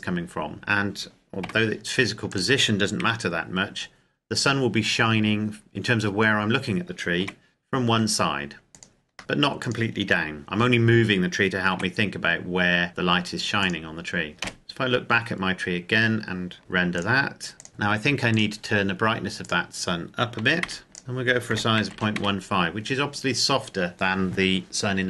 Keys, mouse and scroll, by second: 1.7 g, 2.5 click, 3.1 KP_1, 7.3 r, 8.7 click, 9.2 r, 9.6 click, 10.1 g, 10.4 click, 11.7 r, 13.6 click, 14.5 KP_0, 15.3-16.1 scroll up 1, 16.6 ctrl+click, 18.3 click, 20.4 KP_6, 21.0 click, 21.8 KP_1, 21.9 KP_5, 22.5 KP_Enter.